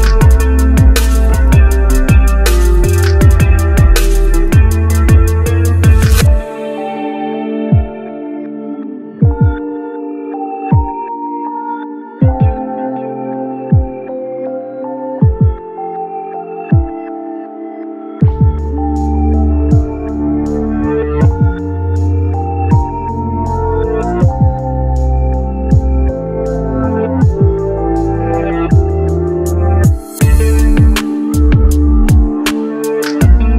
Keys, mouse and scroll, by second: 0.2-1.8 drag, 2.1 click, 4.7 click, 5.7-9.2 drag, 10.6-13.0 drag, 14.9 click, 16.0-18.5 drag, 18.6 click, 19.5 scroll down 2, 19.7-20.2 scroll up 2, 20.2-22.7 drag, 23.4 Tab, 23.7 g, 24.3 click, 24.7 g, 25.3 click, 25.5 g, 26.6 click, 28.1 r, 29.7 r, 32.1-33.5 drag.